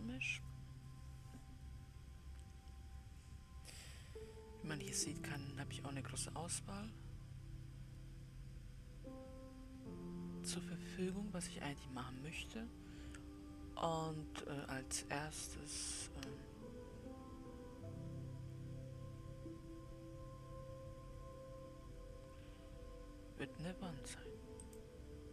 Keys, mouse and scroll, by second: 25.1 click.